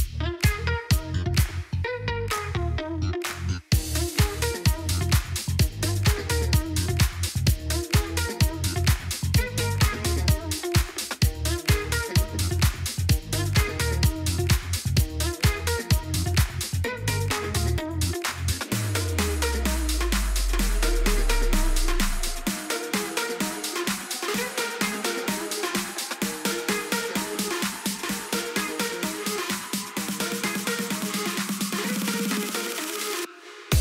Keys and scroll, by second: 0.4 ctrl+b, 8.8-10.0 typing, 10.6 Return, 16.0 3, 16.2 Return, 28.5 3.